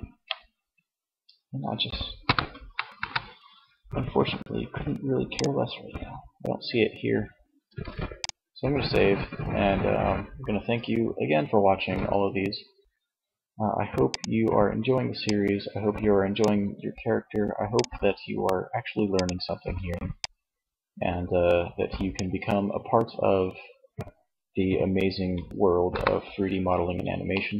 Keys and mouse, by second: 0.0 Escape, 1.3 KP_1, 1.9 KP_0, 6.7 ctrl+s, 13.1-16.0 drag, 16.7-20.9 drag, 25.1 KP_0.